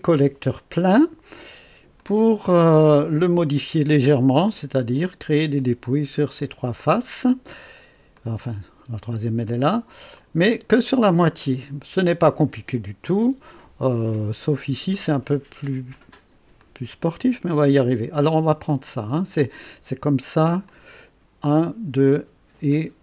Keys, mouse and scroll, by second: 1.9-2.8 drag, 2.9 click, 8.1 click, 9.4-10.8 drag, 11.4-12.1 drag, 13.1-14.1 drag, 14.9 click, 15.9 click, 16.6-17.3 drag, 18.7 click, 19.6 click, 20.7 click, 22.7 click.